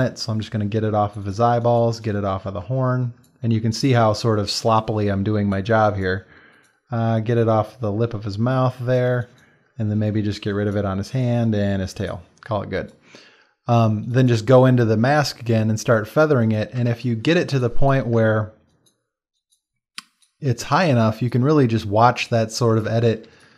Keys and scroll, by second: 1.4 space, 3.6 space, 5.7 space, 9.1 space, 12.5 space, 16.8 space, 22.8 space.